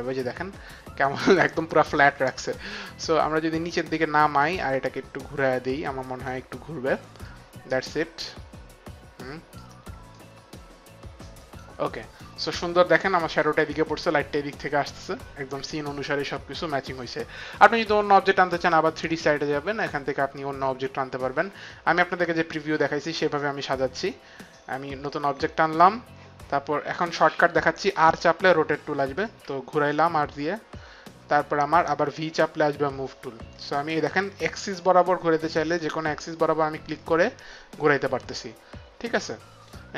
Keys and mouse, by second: 2.7 middle click, 4.7 right click, 7.3 middle click, 10.1 right click, 18.8 click, 21.1 click, 27.9 r, 29.3 click, 33.4 v, 33.5 click, 37.0 click.